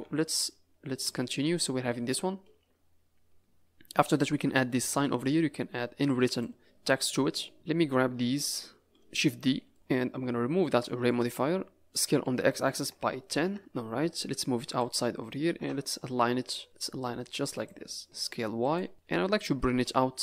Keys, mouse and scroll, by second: 0.0 a, 0.2 scroll down 5, 4.2 scroll up 6, 5.0 middle click, 5.6 scroll up 2, 6.2 click, 8.3 KP_Decimal, 9.4 shift+d, 9.8-10.1 scroll up 4, 11.1 click, 12.5 s, 14.1 click, 15.5 KP_0, 16.2 z, 16.6 click, 18.0 s, 18.9 middle click, 19.7 KP_Decimal.